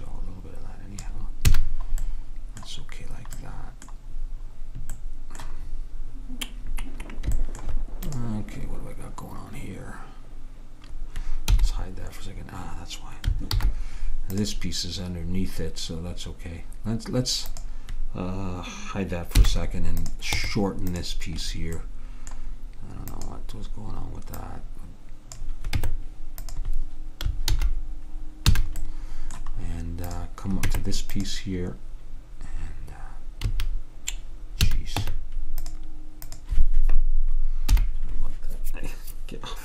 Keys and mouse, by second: 1.6 a, 8.1-9.9 drag, 11.6 h, 13.6 alt+h, 14.4-16.2 drag, 17.6-19.5 drag, 19.5 h, 20.1-21.9 drag, 20.5 Tab, 23.2-26.3 drag, 25.8 Tab, 27.6 alt+h, 28.6 a, 30.2-32.0 drag, 30.7 Tab, 33.6 a, 34.8 a, 35.1 Tab, 36.4-38.2 drag, 37.8 h.